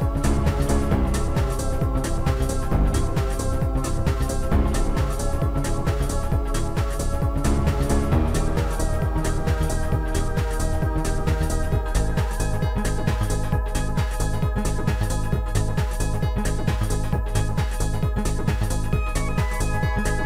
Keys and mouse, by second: 0.4 right click, 0.4 click, 1.2 click, 4.1 click, 5.0 click, 7.4 click, 12.2 click, 16.7 click.